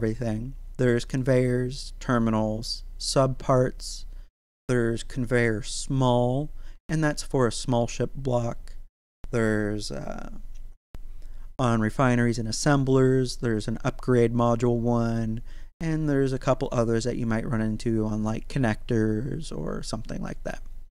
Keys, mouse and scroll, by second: 1.5-2.0 scroll down 1, 2.0 click, 3.7-5.1 scroll up 1, 5.1 click.